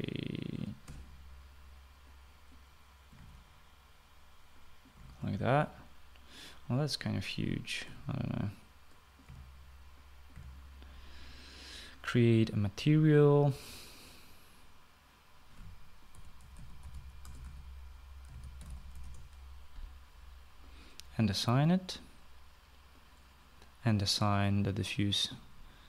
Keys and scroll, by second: 1.1-2.1 typing, 3.9 1, 5.7-6.2 typing, 8.6 8, 9.8-11.1 typing, 16.7-20.2 typing.